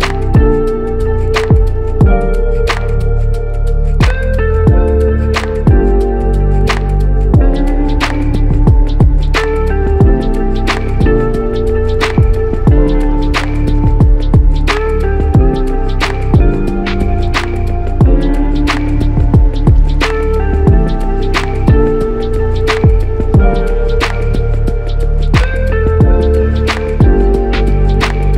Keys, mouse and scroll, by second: 2.9 ctrl+click, 15.5 ctrl+alt+click, 23.3 ctrl+click.